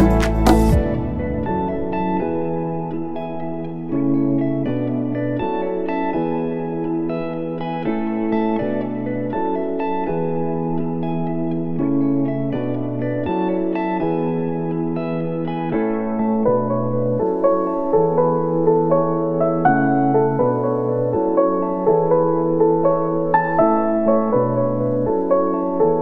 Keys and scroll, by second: 8.1 ctrl+s, 10.8 space.